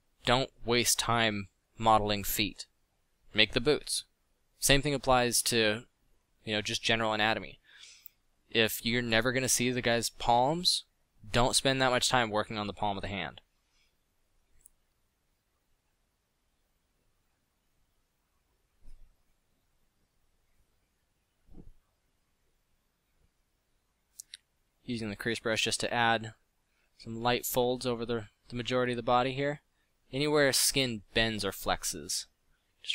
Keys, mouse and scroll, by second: 5.4 ctrl+Down, 17.0 f, 19.1 f, 22.6 f, 27.0 f, 27.5 middle click, 28.6 f.